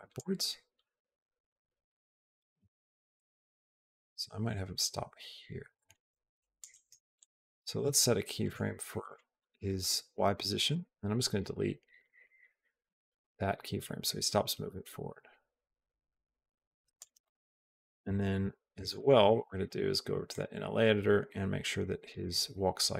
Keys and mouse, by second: 3.0-6.4 drag, 7.0 click, 8.4 right click, 10.5 click, 11.0 click, 11.9 click, 12.7 Delete, 13.0 click, 13.6-16.8 drag, 17.0 click, 17.9 Down, 18.3 Up, 18.8 click, 20.4-22.1 drag.